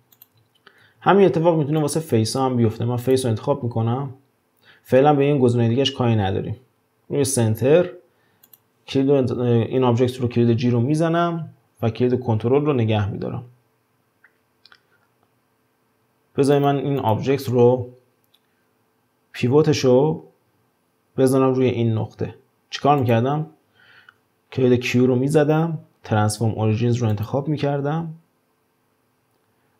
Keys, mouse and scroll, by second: 0.9 ctrl+z, 1.8-4.8 drag, 8.5 click, 10.7 g, 17.0 click, 23.0 click, 25.3 q.